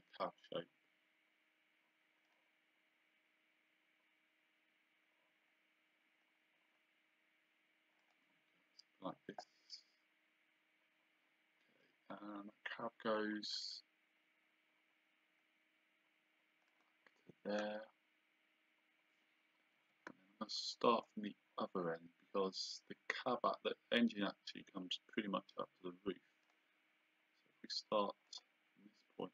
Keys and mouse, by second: 2.3 click, 8.0 click, 16.7 click, 19.8 Escape, 26.5 click, 28.3 click.